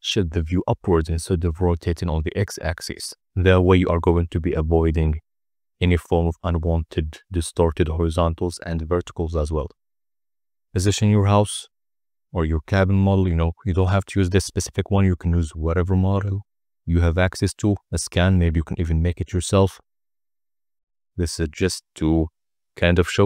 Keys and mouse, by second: 5.2 n, 7.2-7.8 middle drag, 8.6 drag, 9.0-10.5 typing, 12.6 click, 12.6 z, 18.3 r, 18.4 z, 20.9 middle drag, 21.3-22.9 typing, 22.3 Return.